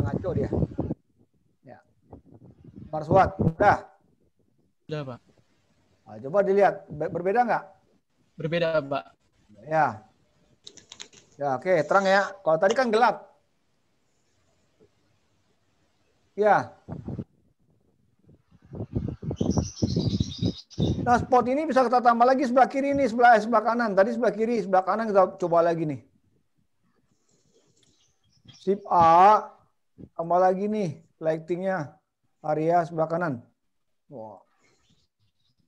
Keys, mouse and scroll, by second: 0.9 click.